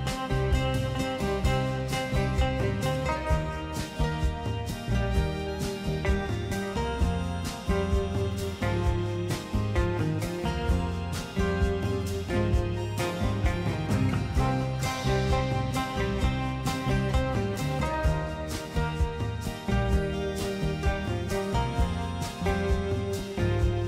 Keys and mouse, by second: 0.8 ctrl+b, 7.8 Tab, 8.2 middle click, 9.8-11.1 drag, 12.8 click, 15.2 middle click, 16.0 Tab, 16.8-19.3 middle drag, 21.5 shift+middle click, 22.9 click, 23.5 middle click.